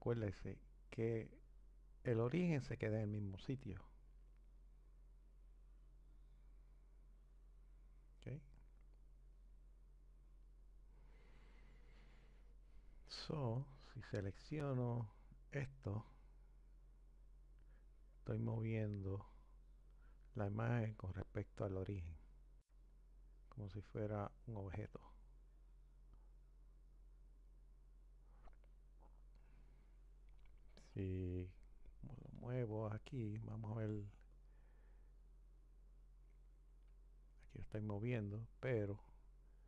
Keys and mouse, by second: 4.5 click, 9.5 click, 13.7 click, 17.1 click, 34.3 click, 35.5-38.3 drag.